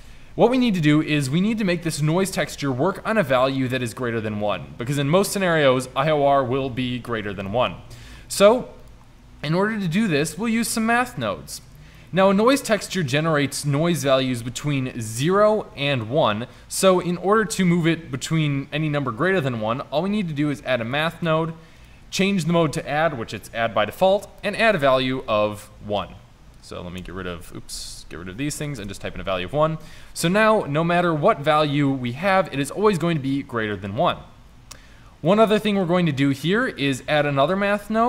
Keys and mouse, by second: 14.4 shift+a, 27.1 BackSpace, 27.9 Delete, 28.0 Delete, 34.1-35.3 drag, 37.2 shift+d.